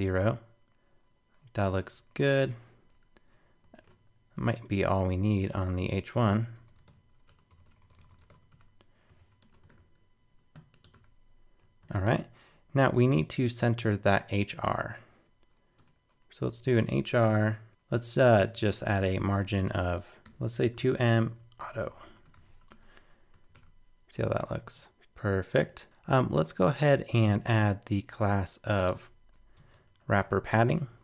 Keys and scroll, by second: 3.8 super+Tab, 9.2 super+s, 9.4 super+Tab, 9.7 super+r, 11.9 super+Tab, 22.4 super+s, 22.7 super+Tab, 23.5 super+r, 25.8 super+Tab.